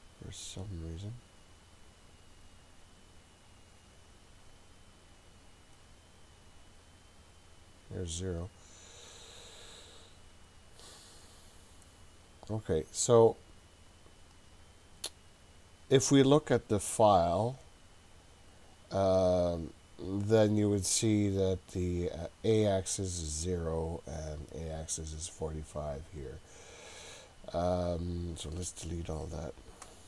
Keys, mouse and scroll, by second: 2.2 click, 2.7 click, 4.6 click, 5.8 click, 13.2 click, 26.2-27.6 scroll down 3, 29.5 click.